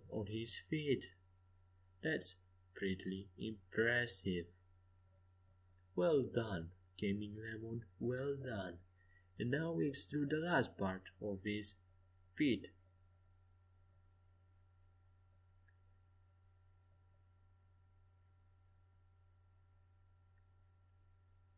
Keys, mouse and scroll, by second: 2.4-5.7 middle drag, 9.0 e, 11.1 s, 13.5 g, 16.2 middle click, 16.8-18.5 middle drag, 18.5 KP_5, 19.8 middle click.